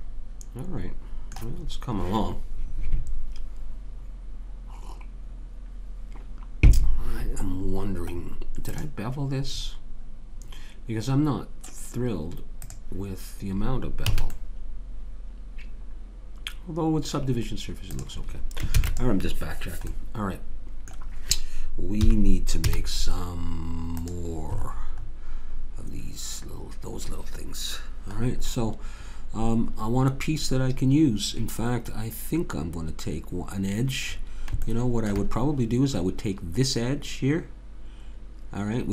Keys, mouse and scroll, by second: 2.1-7.4 middle drag, 8.2 middle click, 8.7 click, 9.6-12.6 middle drag, 12.6 click, 14.2 a, 14.4 middle click, 17.9 click, 18.7 ctrl+s, 22.0 KP_3, 22.6 z, 34.1 middle click, 34.8 middle click.